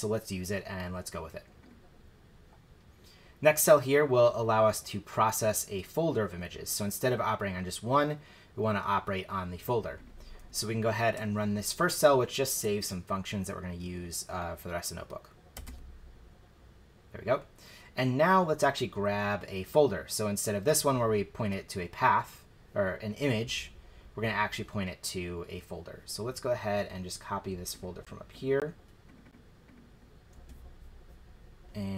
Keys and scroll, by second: 15.5 shift+Return, 30.3 super+c.